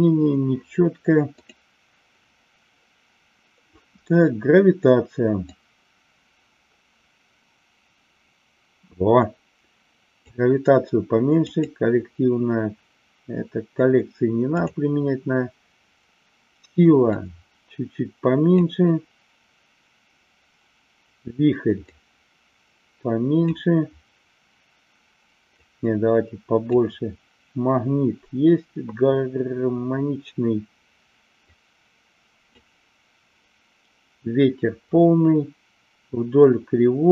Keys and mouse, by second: 5.4-10.3 drag, 11.4-14.6 drag, 17.1-18.6 drag, 21.8-23.4 drag, 25.6-26.7 drag, 31.3-32.6 drag.